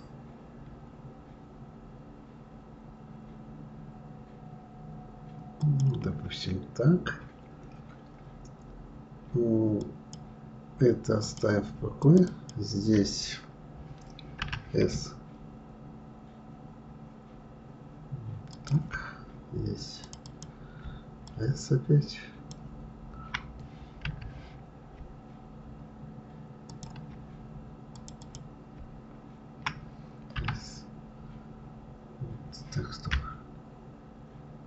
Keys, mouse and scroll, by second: 9.7 click, 11.2 click, 12.0 shift+click, 12.3 shift+click, 14.4 s, 20.0 click, 20.3 click, 21.3 shift+click, 24.1 s, 27.9 click, 28.2 click, 30.3 s.